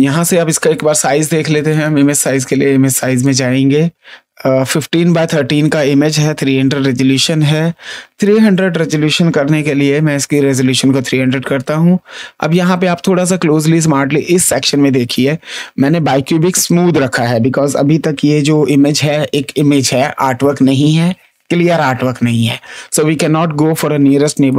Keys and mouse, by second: 1.6 click, 3.2 click, 8.2 click, 9.9 KP_3, 11.8 space, 12.4 click, 24.4 click.